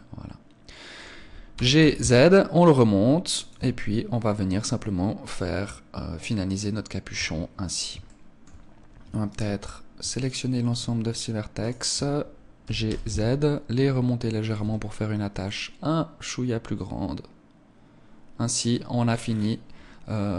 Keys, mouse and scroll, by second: 1.5 g, 3.5 Tab, 3.5 click, 4.4 middle click, 7.1 Tab, 8.0 shift+middle click, 9.2 alt+right click, 10.1 alt+shift+right click, 12.6 g, 14.5 Tab, 14.5 click, 15.1-15.4 scroll down 1, 15.4 middle click, 19.2-20.1 scroll down 10, 20.1 middle click.